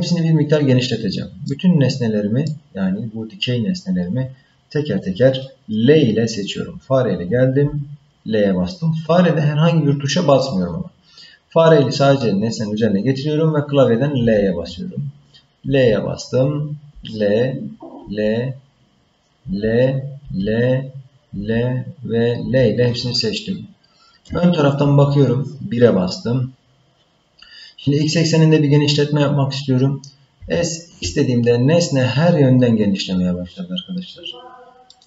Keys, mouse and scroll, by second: 1.5-2.5 middle drag, 7.6 l, 14.2 l, 15.6 l, 16.9 l, 18.0 l, 19.5 l, 20.2 l, 21.4 l, 22.4 l, 24.3 KP_1, 25.7-27.3 scroll up 5, 30.4 s.